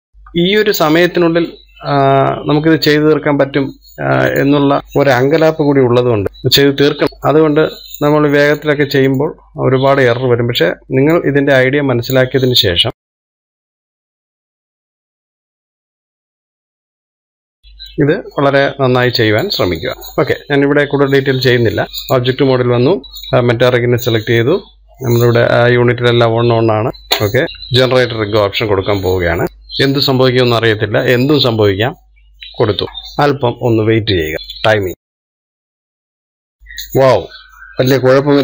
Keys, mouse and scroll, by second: 0.1 middle click, 1.0 scroll up 1, 1.6-4.8 shift+middle drag, 4.8 click, 6.2-6.7 scroll down 4, 6.7-9.1 middle drag, 9.1 click, 10.2 click, 12.3 click, 13.0 shift+middle click, 13.7 shift+s, 15.3 middle click, 15.5 scroll down 4, 15.6 middle click, 15.8 click, 16.4 click, 17.0 click, 17.4 click, 17.6 scroll down 3, 17.8-19.9 shift+middle drag, 20.3 click, 21.2 middle click, 21.9 click, 22.6-25.2 drag, 26.2 click, 27.2 middle click, 27.4 click, 27.8-29.4 scroll down 1, 32.8-36.6 drag.